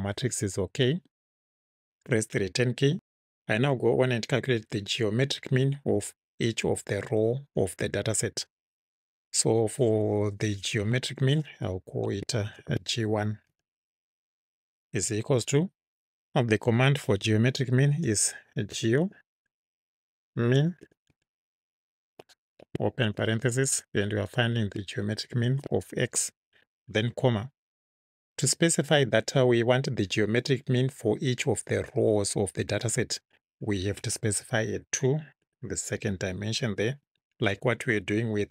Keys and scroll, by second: 2.0 Return, 12.6 shift+g, 13.5 1, 14.9 =, 18.5-22.1 typing, 23.1 shift+9, 25.5 shift+x, 27.1 ', 27.6 ,, 35.4 2, 37.1 Right.